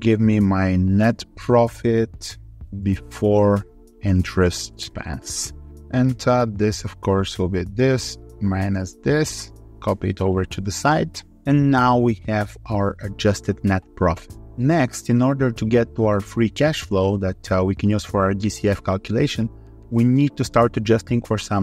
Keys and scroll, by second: 9.4 ctrl+Right, 9.8 ctrl+r.